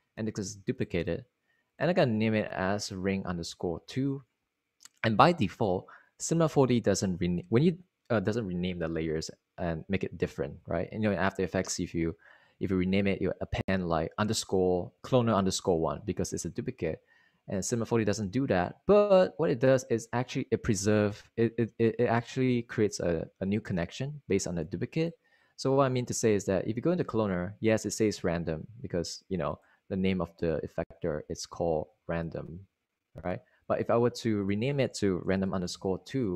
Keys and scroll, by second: 3.6 2, 35.7-36.3 typing.